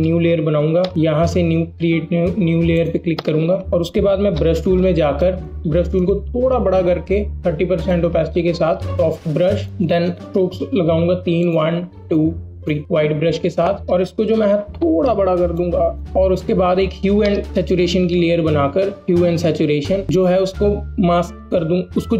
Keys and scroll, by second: 4.2 b, 14.1 ctrl+t, 16.1 Return.